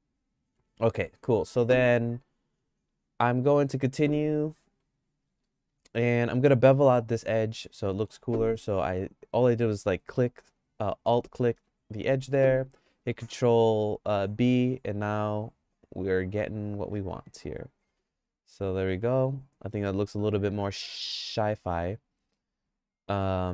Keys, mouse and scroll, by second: 0.1 click, 0.5 Tab, 3.4 click, 4.5 2, 5.4 alt+click, 7.0 middle click, 7.3 shift+middle click, 9.7 click, 13.0 ctrl+b, 17.9 Tab, 18.5 click, 19.1-23.5 middle drag.